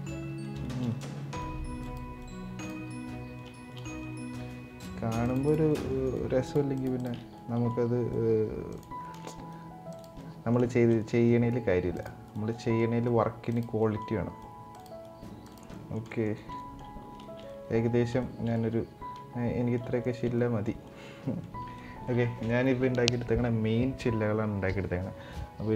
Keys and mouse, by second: 0.3 shift+middle click, 0.6 middle click, 1.1 right click, 1.9 right click, 2.6 middle click, 3.2 shift+middle click, 3.5 middle click, 4.2-5.1 right drag, 5.4 middle click, 5.7 right click, 6.2 ctrl+click, 6.5 ctrl+click, 7.1 middle click, 7.8 right click, 8.7 middle click, 9.2 right click, 10.0 middle click, 10.4 shift+middle drag, 10.7-11.0 middle drag, 11.2 right click, 12.0 right click, 12.2 middle drag, 12.7 right click, 13.6 middle click, 14.2 right click, 14.7 right click, 15.5 middle click, 15.8 middle click, 16.1 shift+middle click, 16.3 middle drag, 17.0 shift+middle drag, 18.0 shift+middle drag, 18.3-19.5 middle drag, 19.7 shift+middle click, 20.1 middle click, 20.6-21.2 middle drag, 21.5 middle click.